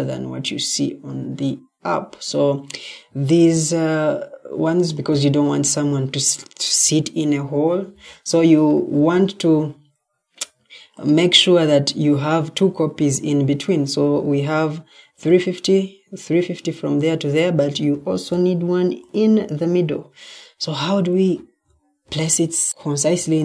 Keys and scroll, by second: 8.6 ctrl+d, 17.8 ctrl+d, 21.2 Escape, 21.9 Escape.